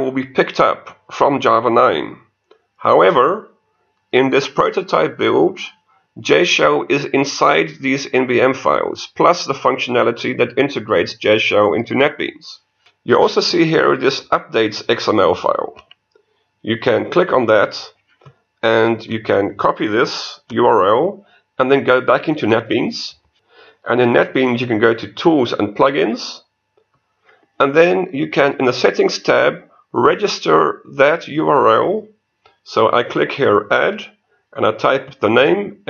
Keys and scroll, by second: 23.3 ctrl+Return.